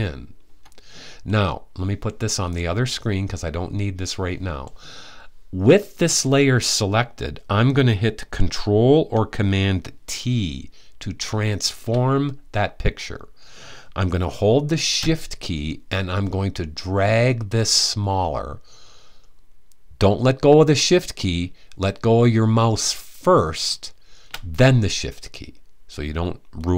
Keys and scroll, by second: 10.9 super+t.